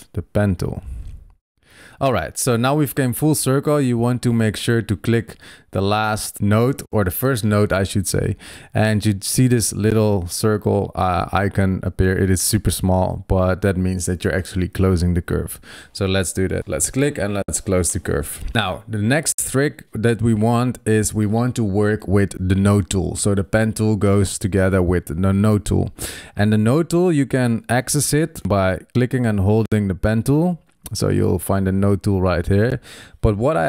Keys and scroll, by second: 5.0 super+z, 19.4 super+0, 24.4 super+=, 25.0 super+=, 27.1 super+=.